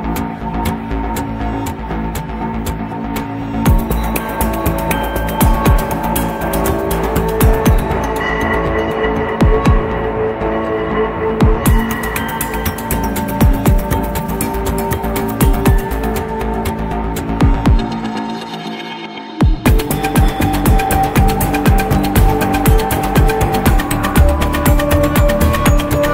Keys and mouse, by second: 4.1-5.9 middle drag, 11.1-11.7 middle drag, 12.2-13.4 middle drag, 14.6 click, 16.1 click, 17.0-17.7 drag, 18.6-19.8 middle drag, 20.9-26.1 drag.